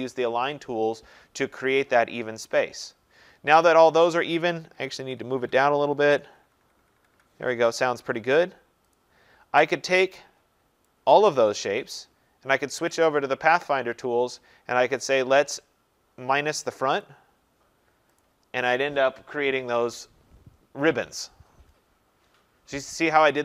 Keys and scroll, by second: 4.7 Down.